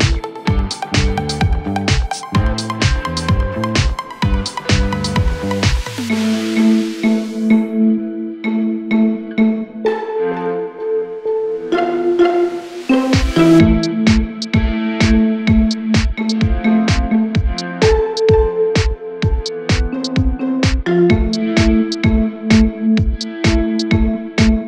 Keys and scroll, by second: 9.2 ctrl+Page_Down, 18.4 ctrl+r.